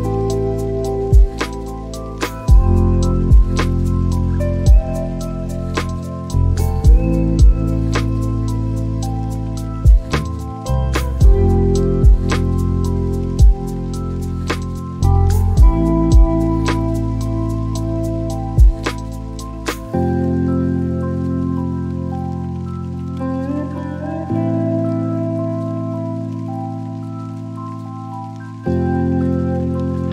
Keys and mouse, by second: 0.1-3.2 drag, 4.9 click, 7.9 click, 10.0 click, 15.9 click, 18.1 click, 21.1 shift+d, 28.9 click.